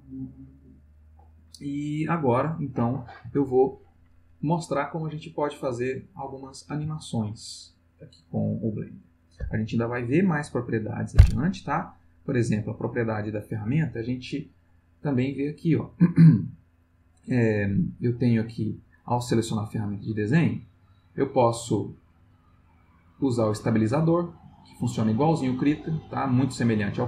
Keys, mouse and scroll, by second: 12.0 click, 15.4 click, 17.7 click, 18.4 click, 20.5 click, 23.5 click.